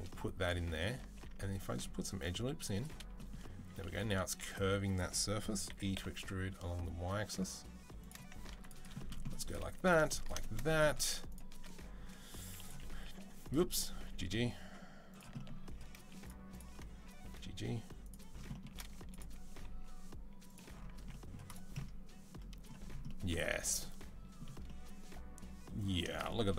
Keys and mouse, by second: 0.0-9.6 middle drag, 1.0 ctrl+r, 3.9 2, 5.5 e, 8.3 ctrl+r, 9.7 ctrl+r, 12.3 1, 12.4 click, 12.9 g, 13.5 click, 13.9 g, 15.4 middle click, 16.3 shift+click, 16.4-18.9 shift+middle drag, 16.9 g, 18.9 click, 19.0-21.3 middle drag, 19.4 g, 20.8 Tab, 21.3-26.5 drag.